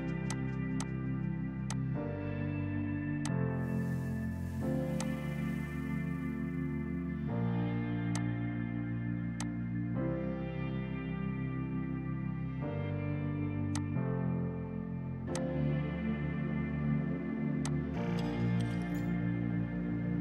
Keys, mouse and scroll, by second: 4.2 g, 5.1 click, 8.2 click, 13.8 click, 16.5 space, 17.7 click.